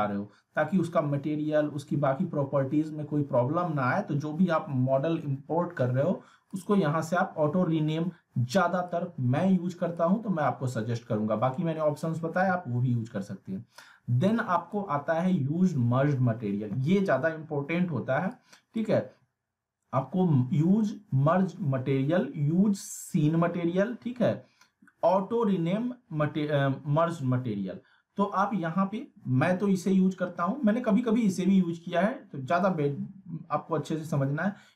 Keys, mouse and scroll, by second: 6.5-10.1 drag, 14.3-14.9 drag, 18.3-18.9 drag.